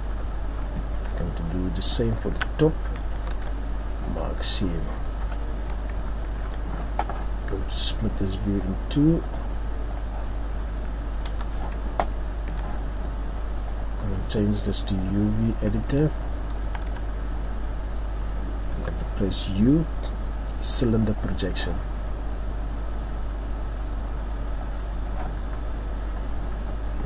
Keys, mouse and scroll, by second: 1.3 alt+right click, 2.4 alt+right click, 3.3 ctrl+e, 4.5-4.8 scroll down 3, 5.2 KP_3, 6.0-6.8 ctrl+scroll up 6, 8.6 right click, 12.0-12.4 ctrl+scroll down 2, 12.0 t, 15.8-16.6 ctrl+scroll up 3, 16.6 a.